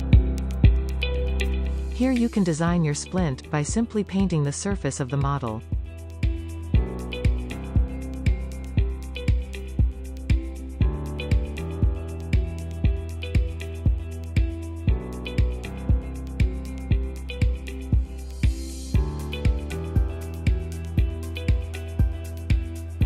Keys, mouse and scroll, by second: 0.9-3.8 drag, 3.8 middle click, 4.7 click, 5.4 scroll down 1, 5.5 middle click, 5.8 click, 6.1-6.7 scroll up 3, 6.7 click, 7.6 click, 8.0 middle click, 8.4-10.0 drag, 10.0 middle click, 10.8-12.1 drag, 12.1 shift+middle click, 12.6 click, 13.8 click, 15.7 scroll down 1, 15.9-16.8 middle drag, 17.3 click, 18.6-18.9 scroll up 2, 18.9 scroll down 2, 19.2-20.9 middle drag, 21.3 click, 21.3 right click, 21.7 click, 21.7 right click, 22.4 click, 22.4 right click.